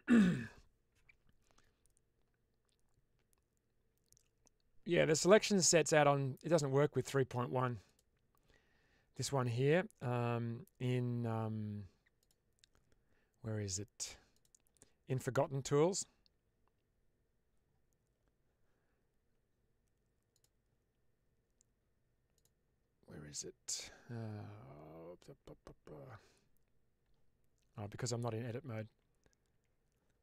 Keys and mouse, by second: 7.7 click, 12.1 click, 14.2 click, 20.2 click, 22.2 click, 27.9 Tab, 28.8 Tab, 29.4 Tab.